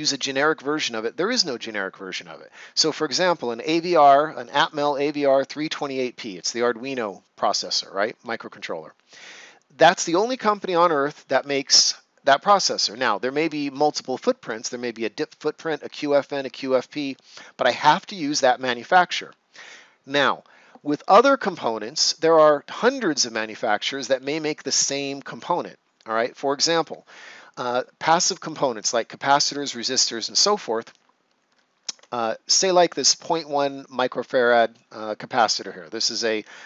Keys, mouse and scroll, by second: 31.3-33.5 ctrl+scroll up 2.